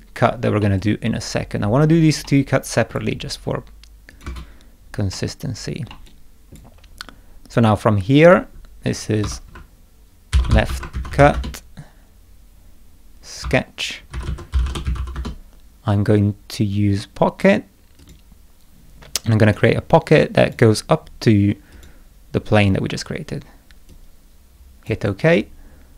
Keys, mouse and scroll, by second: 0.6-1.8 middle drag, 0.8-1.8 drag, 2.2 middle click, 2.3 click, 2.9 scroll down 1, 4.1 click, 4.2 space, 5.1 middle click, 5.8 scroll down 2, 6.0 middle click, 6.0 click, 8.2 click, 9.2 F2, 10.1-11.7 typing, 13.4 F2, 14.0-15.3 typing, 18.0 click, 19.4 click, 20.4 click, 21.7 click, 23.9 click.